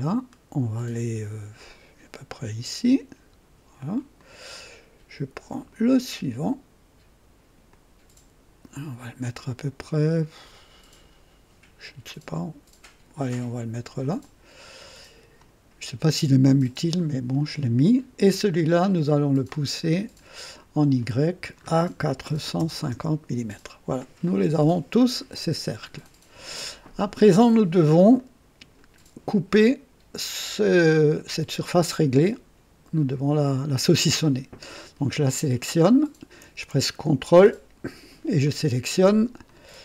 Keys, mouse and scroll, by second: 4.2 click, 5.4 click, 7.7-13.9 drag, 14.8 click, 17.9 click, 19.4 click, 19.9 click, 21.0 click, 22.1 KP_4, 22.5 KP_5, 22.7 KP_0, 22.9 KP_Enter, 24.2 click, 24.7-25.4 drag, 28.2 click, 35.3 click, 38.4 ctrl+click, 39.4 ctrl+click.